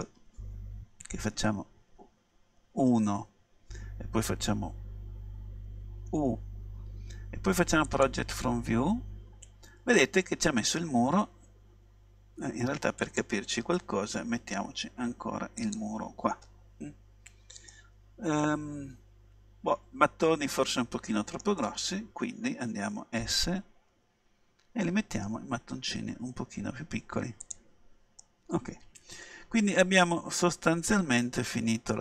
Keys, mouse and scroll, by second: 1.8 KP_1, 6.2 u, 8.1 click, 8.7 middle click, 13.1-14.9 drag, 17.3 middle click, 17.4-17.8 scroll up 2, 17.8-19.7 middle drag, 23.3 s, 27.6-29.6 drag, 28.3-30.8 middle drag.